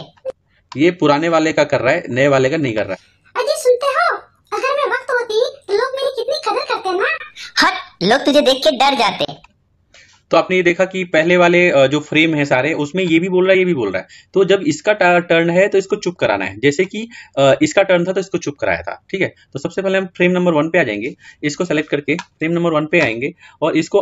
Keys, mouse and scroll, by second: 0.0-11.7 drag.